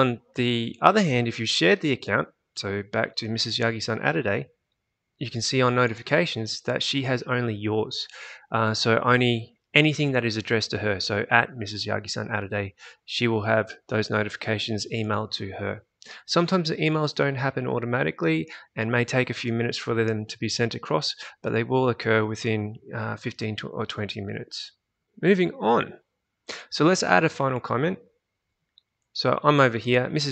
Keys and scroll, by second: 0.9 alt+Tab.